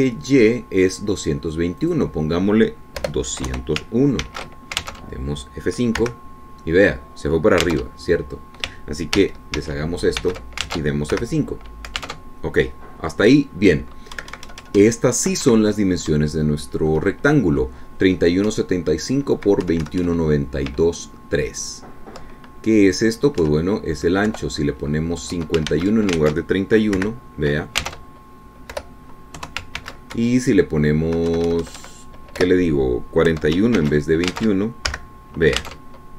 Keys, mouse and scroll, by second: 3.2 click, 4.4 BackSpace, 4.9 KP_0, 5.6 ctrl+s, 6.3 alt+Tab, 7.3 F5, 9.1 alt+Tab, 10.6 ctrl+z, 11.6 ctrl+s, 12.2 ctrl+alt+Tab, 12.5 ctrl+alt+F5, 13.5 alt+Tab, 15.5 Right, 17.5 Right, 19.9 Right, 23.6 Left, 24.8 Right, 25.7 Delete, 26.7 KP_5, 27.1 ctrl+s, 27.6 ctrl+alt+Tab, 28.3 F5, 29.3 alt+Tab, 30.1 BackSpace, 30.7 KP_3, 31.2 ctrl+s, 31.5 ctrl+Right, 32.1 Right, 33.8 BackSpace, 34.7 KP_4, 35.2 ctrl+s, 35.8 alt+Tab.